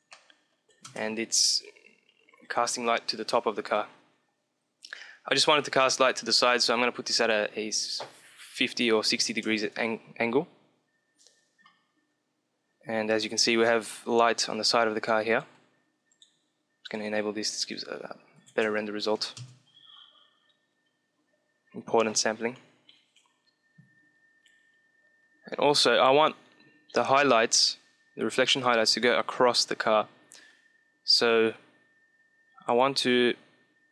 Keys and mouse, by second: 0.8 KP_0, 2.1-3.7 middle drag, 6.5-9.7 drag, 15.2-18.3 drag.